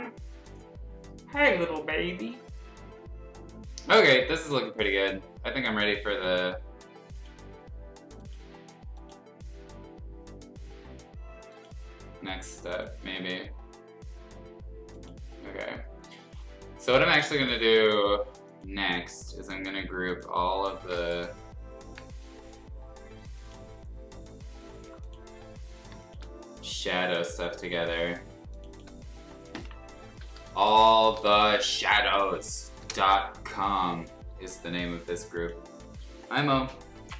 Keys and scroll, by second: 27.5 ctrl+g, 29.8-32.8 typing.